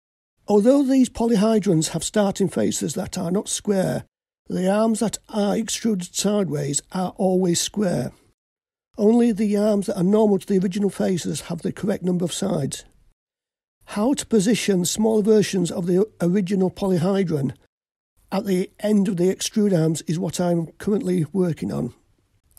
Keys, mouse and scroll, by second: 0.3 click.